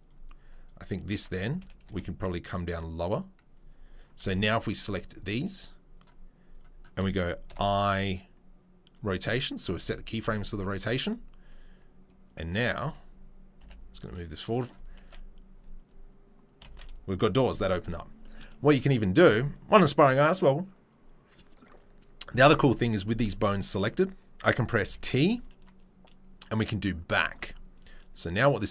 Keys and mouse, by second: 1.8 r, 12.8 a, 13.6 g, 14.0 right click, 15.0 shift+space, 16.7 shift+space.